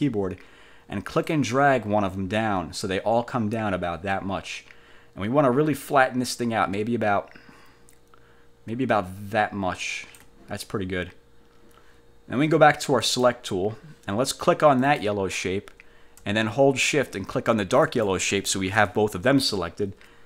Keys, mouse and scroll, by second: 1.4-10.5 ctrl+drag, 13.1 click, 14.9 click, 17.9 shift+click.